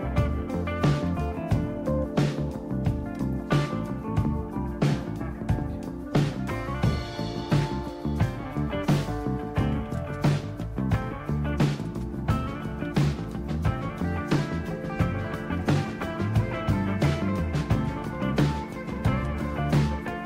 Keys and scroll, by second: 0.5-1.9 typing, 3.0 Return, 9.5-13.4 typing, 15.0 typing, 16.5-19.2 typing.